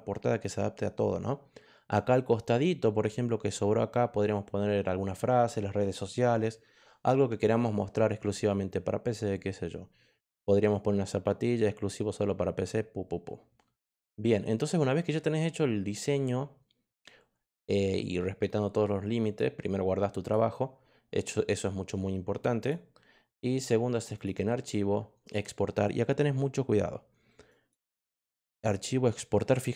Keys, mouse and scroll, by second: 19.2 click, 20.2 click, 22.5 click, 24.1 click, 25.2 click, 27.4 click.